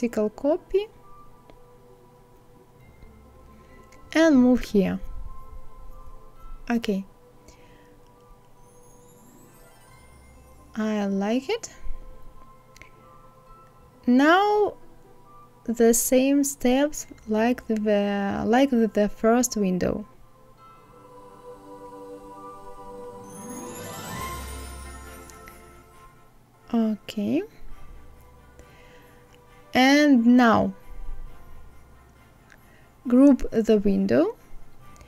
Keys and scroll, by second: 14.4 ctrl+c, 14.9 ctrl+f, 18.0 ctrl+c, 25.9 ctrl+c.